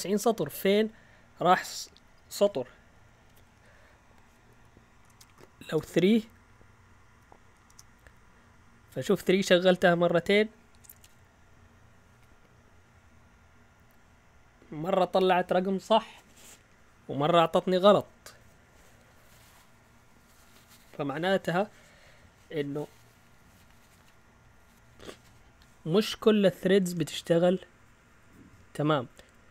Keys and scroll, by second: 2.9 Up, 3.5 Left, 4.1 Left, 4.2 Left, 5.1 BackSpace, 5.3 BackSpace, 5.7 Return, 7.1 Up, 7.7 Return.